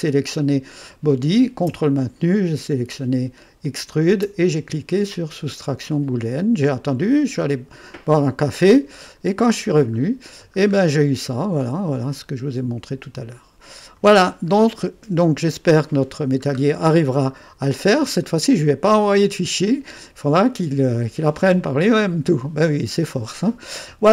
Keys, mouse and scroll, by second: 0.0 click, 3.6 click, 7.3-10.0 drag, 10.0-11.3 scroll up 1, 11.3 right click, 12.1-13.9 drag, 15.1 2, 16.0-16.8 scroll down 1, 16.8-17.1 scroll down 1, 17.5-18.2 scroll up 1, 18.2 right click, 19.2-20.2 scroll up 1, 20.2 click, 21.2 right click.